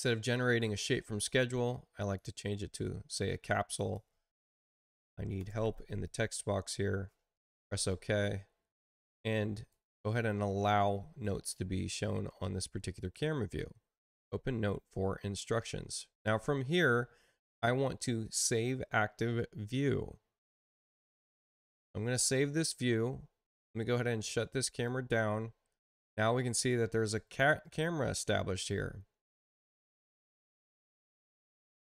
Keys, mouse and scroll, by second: 0.2 click, 1.9 click, 3.7 click, 4.4-6.5 typing, 7.3 Return, 9.1 click, 20.9 click, 24.6 click, 31.6 space.